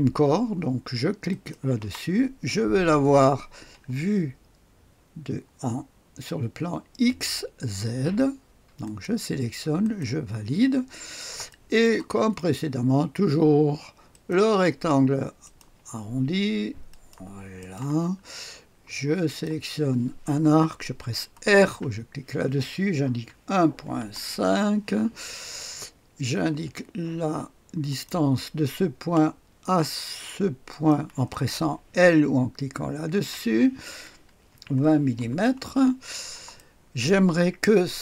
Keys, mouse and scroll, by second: 1.2 click, 8.8 click, 9.8 click, 10.9-11.8 scroll up 1, 11.4-12.4 right drag, 14.0 click, 15.4 click, 16.8 click, 17.5 middle click, 18.2-19.2 scroll up 1, 19.2 click, 21.6 r, 23.0 KP_1, 23.4 ., 23.7 KP_5, 24.0 Return, 25.1-26.8 scroll up 1, 27.8 click, 30.6 click, 33.0 i, 34.4 KP_2, 34.7 KP_0, 35.1 Return, 35.8-36.5 scroll down 1, 36.5 click, 36.6 right click.